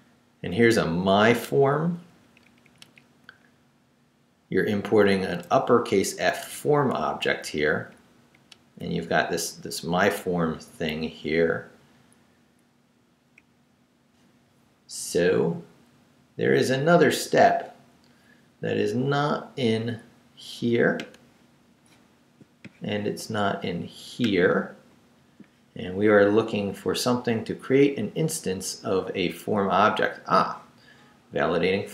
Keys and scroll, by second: 0.6 Right, 2.2 Up, 3.3 Right, 5.0 Right, 5.4 Left, 6.3 Right, 7.0 Down, 8.8 Up, 9.4 Left, 11.0 Down, 12.8 Down, 13.4 Up.